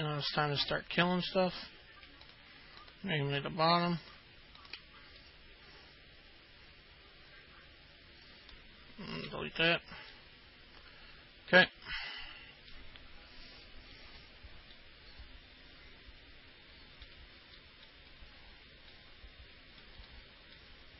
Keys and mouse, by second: 1.8 ctrl+click, 3.0 ctrl+click, 3.6 ctrl+click, 4.2 ctrl+click, 4.8 ctrl+click, 5.4-8.8 alt+middle drag, 10.3-12.9 alt+middle drag, 15.0-17.3 alt+middle drag, 17.8 middle click, 19.2-20.0 alt+middle drag, 20.3 middle click.